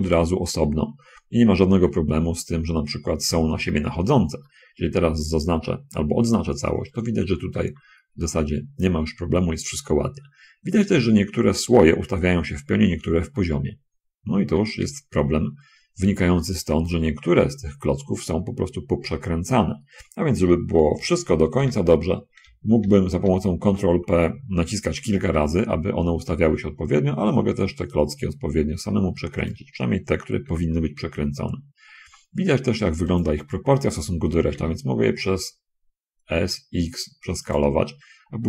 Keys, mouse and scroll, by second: 1.0 middle click, 4.1 shift+click, 4.7 shift+a, 5.9-7.1 drag, 15.1 ctrl+z, 21.1 l, 21.8 shift+l, 22.7 l, 23.6 l, 25.6 r, 29.7 ctrl+click, 30.5 g, 34.5 s, 34.8 x.